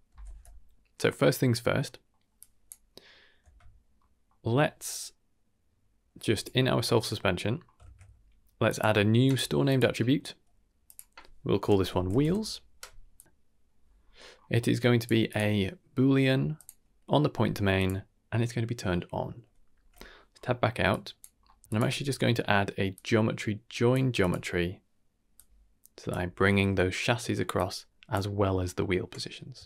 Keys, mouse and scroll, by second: 1.5 scroll down 2, 1.8 middle click, 2.3 drag, 3.4 Tab, 3.9 middle drag, 6.3 click, 6.8 Tab, 7.2 middle click, 7.5 scroll up 2, 7.8 shift+a, 10.8-12.2 drag, 11.9 e, 13.1 click, 13.9-14.3 scroll up 2, 14.5 middle click, 14.5 scroll up 2, 14.9 click, 15.2-16.6 drag, 17.7 click, 19.7 Tab, 20.2 scroll down 2, 20.4 middle click, 20.9 click, 21.3 scroll down 1, 21.4 middle click, 21.6 ctrl+z, 21.6 ctrl+shift+right click, 21.6 shift+a, 25.3-26.1 drag, 27.2 middle click, 27.6-28.2 drag.